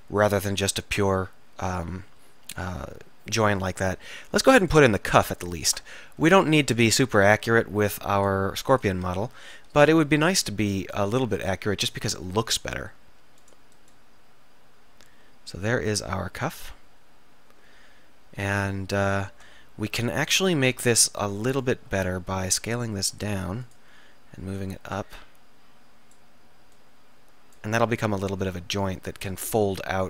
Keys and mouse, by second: 0.5 middle click, 6.0 middle click, 6.3-11.2 drag, 6.3-9.4 right drag, 10.1 e, 12.2 click, 21.7 middle click, 22.6 s, 23.7 click, 24.7 click.